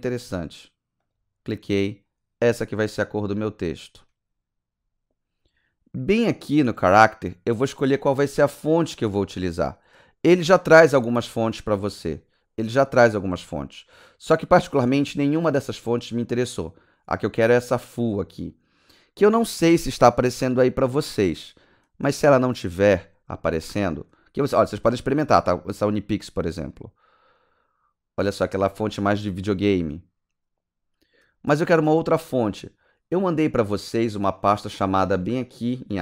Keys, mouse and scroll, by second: 1.0 click, 3.2 click, 4.4-4.8 scroll up 3, 14.0 click, 25.2 click, 26.7 click, 33.9 click.